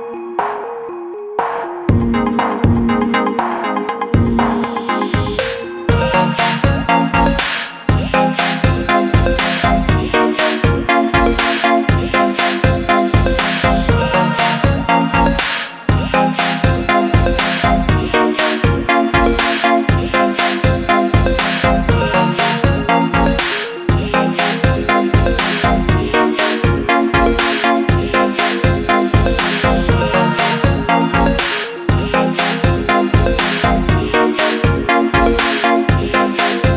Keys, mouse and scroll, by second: 0.1 Caps_Lock, 0.3-3.1 typing, 5.3 click, 9.0 Caps_Lock, 9.0 alt+shift+click, 11.9 alt+shift+click, 13.3 click, 15.4 typing, 15.8 click, 24.7 alt+shift+click, 25.7 click, 29.9 alt+click, 30.9 right click, 33.2 click.